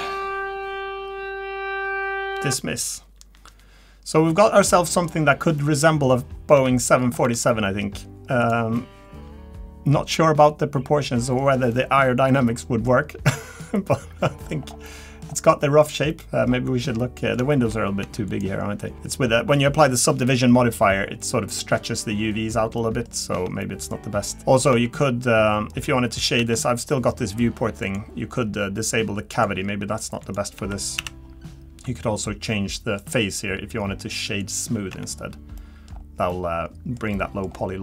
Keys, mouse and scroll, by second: 4.9 middle click, 5.1-5.6 scroll down 2, 5.6 middle click, 6.0 scroll up 1, 6.6 Tab, 6.6-7.0 scroll up 3, 7.0-7.5 scroll down 3, 7.3 Tab, 7.5 middle click, 8.0-8.4 scroll up 1, 8.4 click, 8.7 middle click, 11.7 middle click, 12.9 middle click, 12.9-13.6 scroll up 4, 13.4 middle click, 13.6 scroll down 1, 13.9 middle click, 14.5 scroll down 2, 14.7 scroll up 1, 14.8 middle click, 15.2-16.1 scroll down 3, 15.6 middle click, 16.1 middle click, 16.5-17.0 scroll up 4, 17.0 middle click, 17.5 shift+middle click, 17.6 shift+middle click, 18.0 Tab, 18.3 click, 18.8 middle click, 18.9-19.2 scroll down 1, 21.0 scroll up 1, 22.3-22.8 scroll down 2, 22.8 middle click, 23.1 scroll down 2, 23.3 Tab, 23.6 middle click, 24.2 middle click, 24.7 Tab, 25.5-25.9 scroll up 3, 25.9-26.4 scroll down 2, 26.4 Tab, 27.8 click, 30.2 click, 30.6 Tab, 31.0 a, 33.0 click, 34.9 Tab, 35.6 middle click, 35.9-36.3 scroll down 3, 36.3 middle click, 37.1 middle click, 37.5-37.8 scroll up 4.